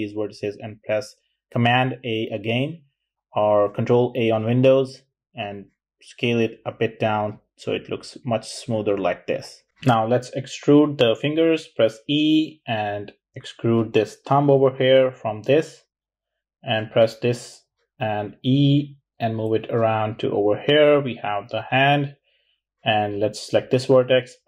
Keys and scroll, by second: 0.2 super+a, 10.9 e, 17.1 e, 23.5 e.